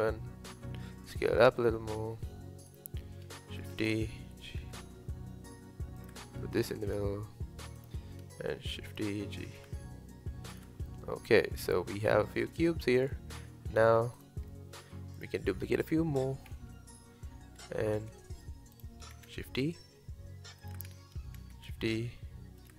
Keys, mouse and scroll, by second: 2.7 click, 3.6 shift+d, 4.3 g, 7.8 click, 8.7 shift+d, 9.1 g, 10.9-12.3 middle drag, 12.3-12.7 scroll up 1, 12.7-14.2 shift+middle drag, 14.2 click, 14.5-15.2 middle drag, 15.2 click, 15.6 middle click, 16.5 KP_7, 17.7 g, 19.1 shift+d, 21.6 shift+d.